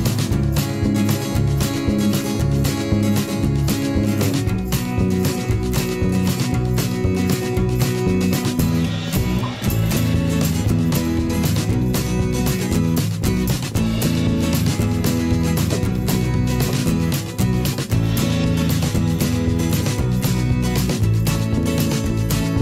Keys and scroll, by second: 0.1 ctrl+z, 0.6 b, 2.0 v, 2.8 ctrl+shift+[, 3.2 shift+Right, 3.7 Right, 4.7 Left, 5.3 Down, 5.5 Left, 5.6 Down, 5.8 Right, 11.6 b, 14.3 ctrl+z.